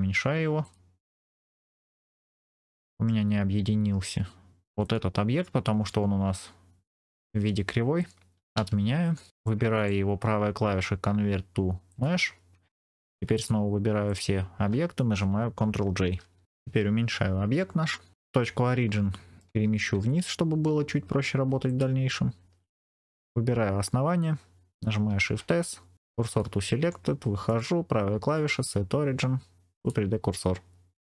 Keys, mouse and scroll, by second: 0.5 click, 1.1 scroll up 2, 2.0-3.0 middle drag, 4.7 click, 8.5 ctrl+z, 9.3 click, 9.6-12.7 right drag, 13.2 click, 14.0 shift+click, 16.1 ctrl+j, 16.4 scroll down 3, 16.7 s, 18.0 click, 18.1-18.8 scroll up 4, 18.8 middle click, 19.8 Tab, 20.4-21.3 scroll up 2, 21.5 alt+click, 23.1 2, 23.1 alt+click, 25.1 shift+s, 26.7 Tab, 27.4-30.4 right drag, 30.4-31.0 scroll down 2, 31.0 shift+middle click, 31.0-31.1 scroll up 1.